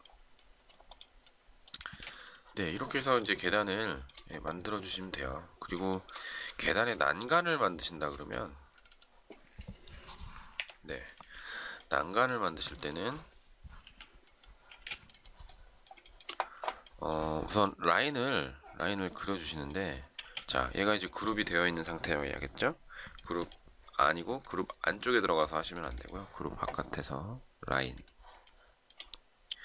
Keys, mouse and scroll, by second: 1.8 space, 3.8 shift+middle click, 5.9 shift+middle click, 7.0 shift+middle click, 10.5 Delete, 13.7 e, 14.7 space, 16.0 shift+middle click, 20.2 space, 28.4 shift+middle click.